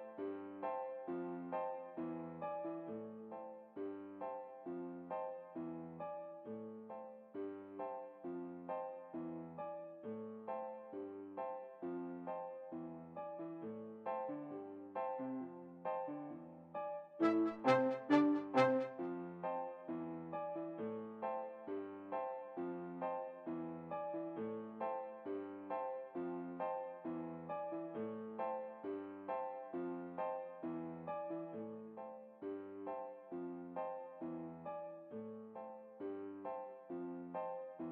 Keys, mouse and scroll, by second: 0.3 x, 2.2-3.9 drag, 3.1-4.6 middle drag, 4.2 alt+a, 9.0 Escape, 9.7-11.2 drag, 11.5-14.1 drag, 13.1-14.6 middle drag, 14.3 a, 14.4 a, 14.9 a, 15.6 x, 17.0-18.7 drag, 18.0-19.6 middle drag, 18.7 alt+a, 26.0 Escape, 26.5-28.0 middle drag, 31.2 a, 31.4 a, 33.5 t.